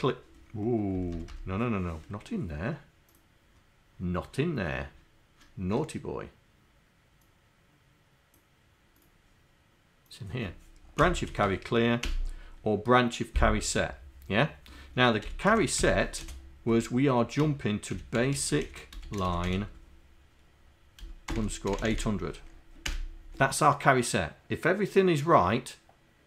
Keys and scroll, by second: 1.0 BackSpace.